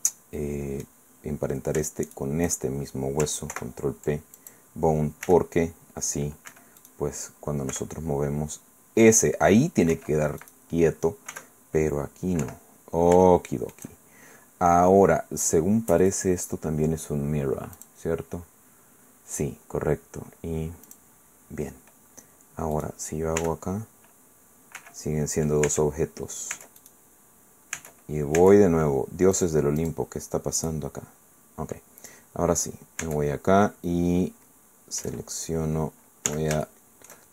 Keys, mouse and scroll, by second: 2.1 shift+right click, 3.5 ctrl+p, 4.4 ctrl+click, 5.2 r, 6.5 Escape, 6.8 click, 7.7 r, 9.9 Escape, 10.4 click, 11.3 r, 12.4 Escape, 13.2 shift+click, 13.9 shift+middle click, 16.0 click, 17.8 click, 20.9 click, 22.7 click, 23.4 r, 24.8 Escape, 25.7 Tab, 26.5 Tab, 26.8 click, 27.8 Tab, 29.4 click, 29.8 click, 30.6 right click, 33.0 Tab, 35.0 a, 35.4-36.2 scroll up 1, 36.3 z, 36.6 shift+click.